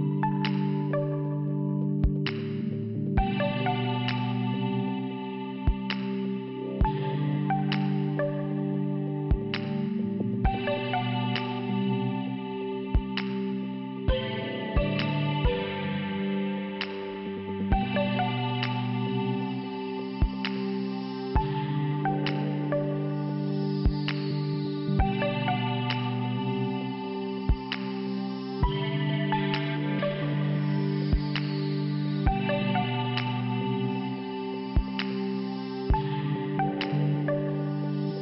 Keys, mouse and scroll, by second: 0.4 click, 0.4 click, 1.8 click, 5.5 scroll up 1, 6.2-6.8 scroll up 1, 7.3 click, 9.2 click, 10.7 click, 10.8 click, 11.8 click, 14.0 click, 14.1 click, 19.0 click, 20.1 click, 20.2 click, 22.0 click, 22.2 click, 22.3 click, 23.0 click, 23.1 click, 23.2 click, 24.0 click, 29.7 click, 29.8 click, 30.4 click, 31.4 click, 31.6 click, 32.3 click, 32.4 click, 32.4 click, 32.5 click, 33.5 click, 33.6 click, 34.8 click, 36.4 click, 36.5 click, 37.2 middle click.